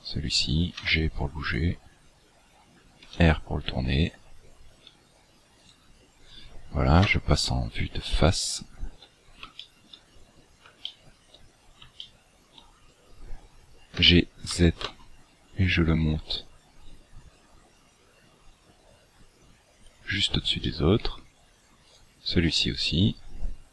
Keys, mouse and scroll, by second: 0.7 g, 3.0 r, 5.6 right click, 7.0 KP_1, 8.1-8.7 scroll down 10, 9.1-9.5 scroll up 5, 9.5 shift+middle click, 10.0-10.4 scroll up 6, 10.8 shift+middle click, 11.5 scroll up 2, 11.9 shift+middle click, 14.0 g, 20.6 middle click, 21.8 right click.